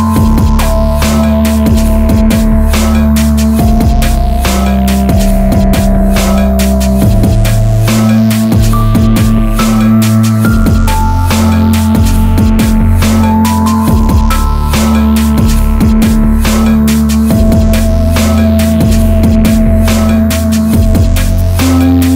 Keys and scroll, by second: 2.4 Return, 8.0 Down, 11.8 Up, 12.2 Down.